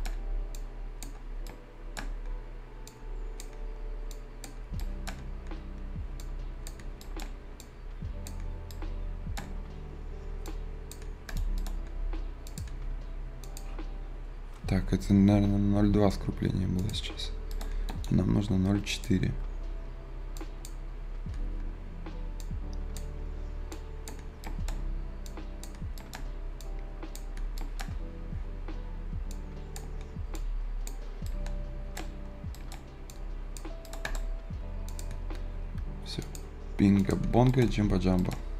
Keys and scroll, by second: 3.4 v, 29.7 z.